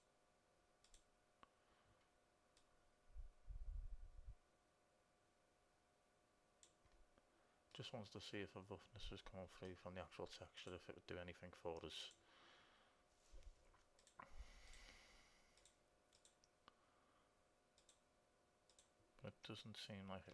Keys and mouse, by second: 0.1-2.0 drag, 2.8-5.5 drag, 8.0-10.1 middle drag, 10.9-17.5 drag, 18.2-20.0 drag.